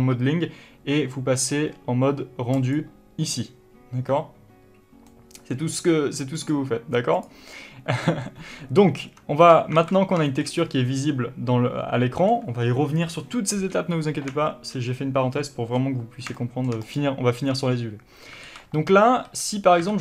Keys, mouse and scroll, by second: 0.0 click, 2.9 click, 5.4-6.7 middle drag, 6.7-8.1 drag, 8.5-12.3 middle drag, 8.8 Tab, 10.1 alt+a, 16.5 middle click, 16.5 scroll up 1, 17.2 click, 17.9 Tab, 18.8 alt+a.